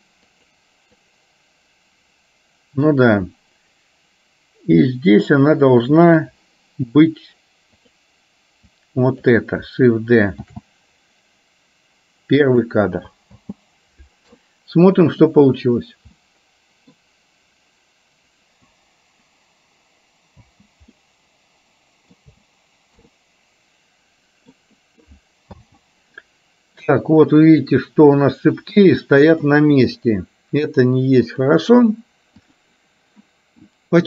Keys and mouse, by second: 1.2-6.5 drag, 7.9 click, 8.7 click, 10.6 shift+d, 13.5 space, 15.5 click, 16.4 middle click, 20.6 space, 21.0-22.2 middle drag, 22.6 space, 23.4-24.7 middle drag, 25.6 space, 26.2 middle click, 29.4 click, 31.5 click, 32.6 click.